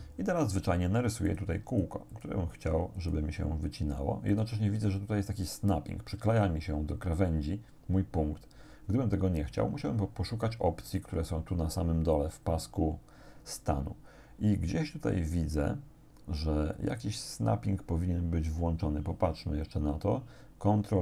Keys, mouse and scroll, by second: 1.3 click, 1.7 click, 3.0 click, 4.3 click.